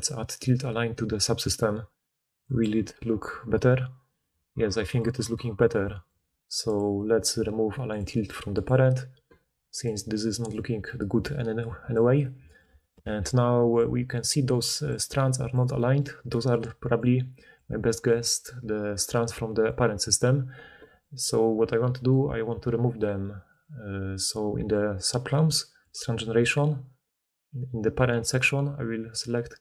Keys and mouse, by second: 6.7-7.9 right drag, 7.9-11.8 middle drag, 13.5 d, 14.8 d, 15.0 d, 15.5 d, 16.5-19.8 typing, 19.1-23.6 drag, 25.3-25.8 middle drag, 25.8-29.6 drag.